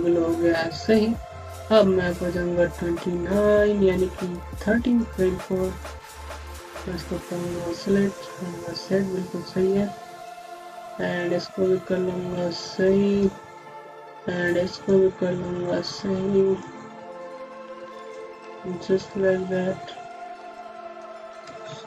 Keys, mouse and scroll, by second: 2.6 click, 8.7 ., 10.1 click, 14.7 click.